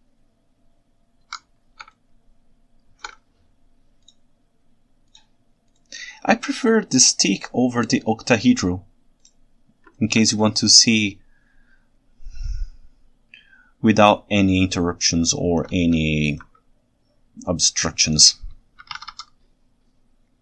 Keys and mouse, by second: 1.4 Escape, 2.0 ctrl+shift+right click, 2.2 ctrl+shift+middle click, 2.3 ctrl+shift+right drag, 2.6 ctrl+shift+middle click, 2.9 ctrl+shift+right drag, 10.0 ctrl+alt+right click, 10.4 ctrl+shift+right click, 11.3-13.2 ctrl+shift+middle drag, 13.4-14.0 ctrl+shift+middle drag, 14.0-15.6 ctrl+shift+right drag, 16.1-16.4 ctrl+alt+middle drag, 19.1 y.